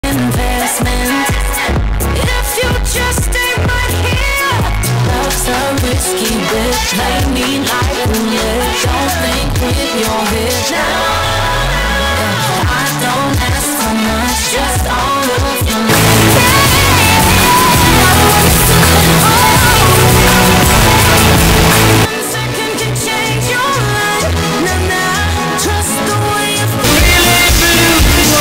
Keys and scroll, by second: 0.1 ctrl+q, 3.1 s, 3.3-5.0 Down, 5.5 Down, 5.7 Down, 6.8 Return, 22.7 Page_Down.